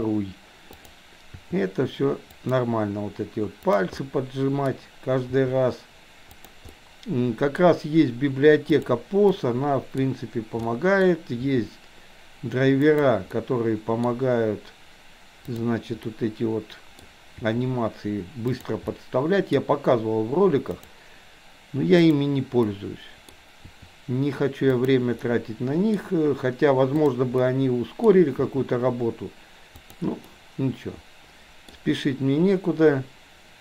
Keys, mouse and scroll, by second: 1.3 r, 3.7 click, 4.1-4.7 middle drag, 5.4 r, 6.7-7.7 middle drag, 8.9 drag, 9.4-10.1 middle drag, 10.8 middle click, 11.4 r, 13.4 middle click, 15.6 click, 16.2 middle click, 17.4 r, 18.9-19.7 middle drag, 20.7 click, 22.1 click, 22.7-23.3 middle drag, 23.6 r, 25.2-26.1 middle drag, 27.1 click, 27.4 middle click, 28.4 r, 30.4-31.7 middle drag.